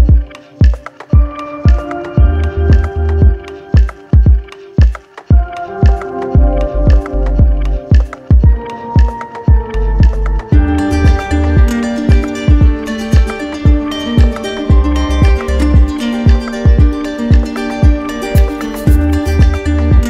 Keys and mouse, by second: 0.2 right click, 2.2 click, 2.9 ctrl+z, 6.7 click, 7.1 ctrl+z, 11.2 click, 12.2 click, 12.6 shift+click, 14.8 right click, 16.3 click, 16.7 ctrl+z, 17.6 right click, 19.1 click.